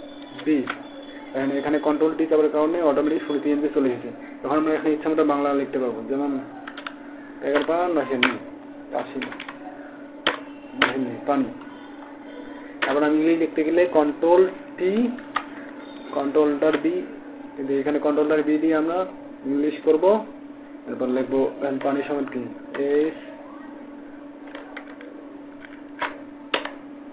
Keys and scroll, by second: 15.0 ctrl+alt+b.